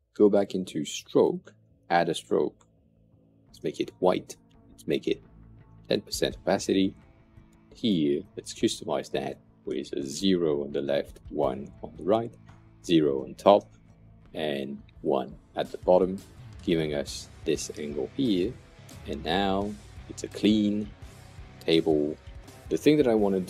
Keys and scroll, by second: 3.4 Return, 5.2-6.1 typing, 9.5 0, 10.6 Tab, 13.5 0, 14.7 Return, 21.6 super+\.